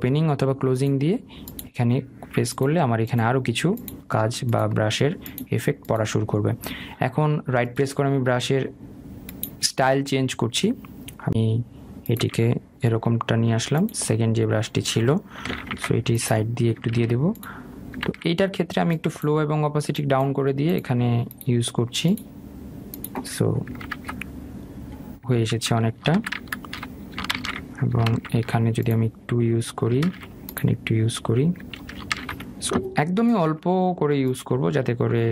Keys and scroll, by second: 14.8 [, 16.2 ctrl+z, 24.4 ctrl+z, 26.6 ctrl+alt+z.